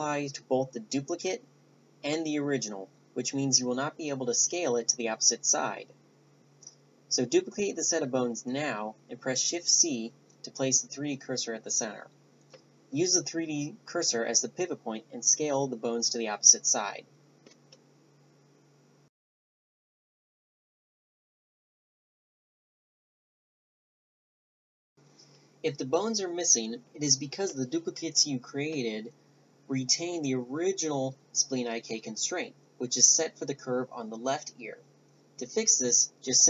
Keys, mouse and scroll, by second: 3.7-4.8 middle drag, 3.7 shift+d, 4.4 s, 11.2-12.4 middle drag, 12.9 middle click, 12.9 a, 13.2 Tab, 13.6 right click, 14.1 right click, 15.8 shift+d, 16.4 s, 16.7 middle click, 19.5 middle click, 20.2 right click, 20.4 Tab, 20.8 ctrl+n, 21.2 right click, 21.5 ctrl+n, 21.9 right click, 22.1 ctrl+n, 22.5 middle click, 22.6 right click, 22.8 ctrl+n, 23.5 ctrl+n, 23.7 right click, 24.0 right click, 24.4 a, 31.3-34.2 right drag, 34.5 right click.